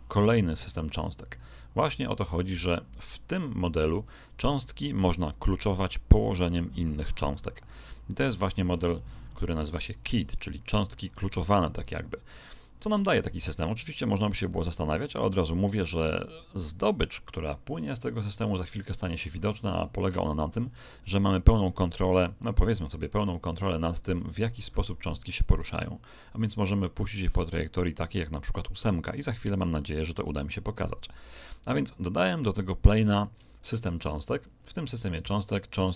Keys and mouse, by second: 3.2 click, 9.5 KP_1, 10.7-13.1 middle drag.